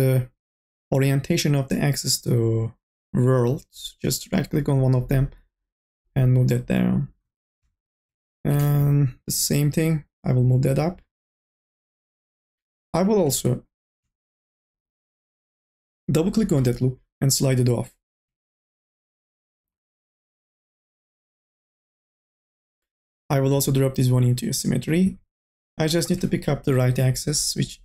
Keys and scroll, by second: 8.8 1, 9.2 2, 10.6 1, 12.6 2, 16.5 m, 16.8 o, 18.6 ctrl+z.